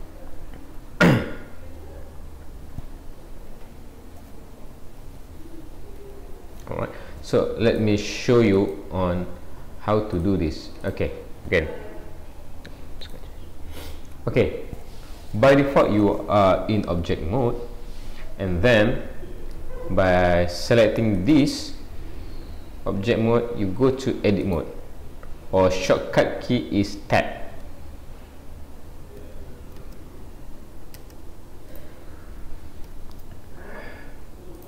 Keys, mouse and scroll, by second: 5.2 alt+g, 6.0 alt+r, 7.7 click, 8.7 click.